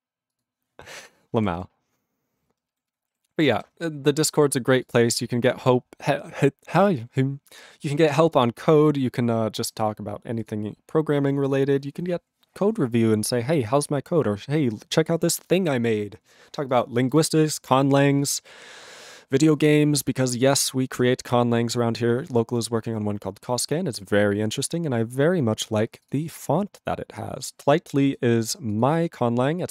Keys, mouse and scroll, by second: 0.4 ctrl+s, 1.5 ctrl+s, 2.4 ctrl+space, 2.8 ctrl+alt+b, 2.9 ctrl+g, 3.2 ctrl+s.